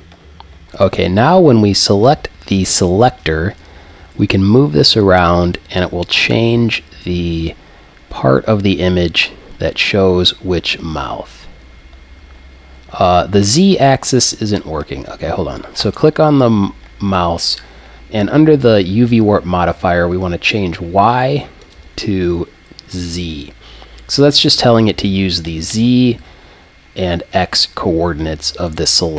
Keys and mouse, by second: 0.6 alt+g, 0.6 click, 4.0 g, 14.4-17.5 drag, 15.8-17.5 right drag, 17.5 middle click, 21.6-23.6 drag, 28.7 right click.